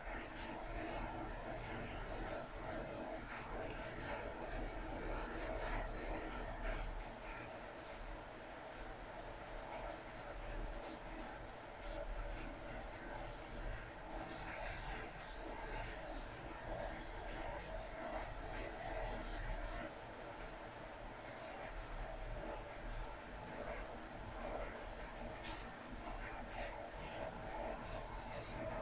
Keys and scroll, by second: 5.0 scroll up 1, 5.9 scroll down 1, 7.4 scroll up 1, 7.9 scroll down 1, 18.0 scroll down 1, 22.2 scroll up 1, 23.3 scroll down 1.